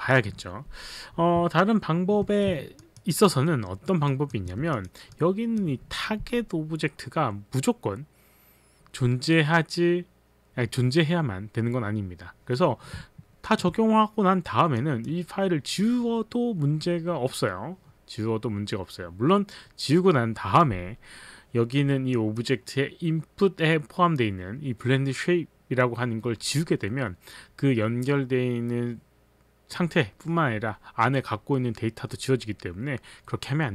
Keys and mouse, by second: 2.8 alt+click, 3.1 alt+right click, 3.8 alt+middle click, 3.8 alt+right click, 3.9 alt+right click, 4.3 alt+click, 4.7 click, 5.3 click, 13.5 alt+click, 14.8 click, 22.2 click.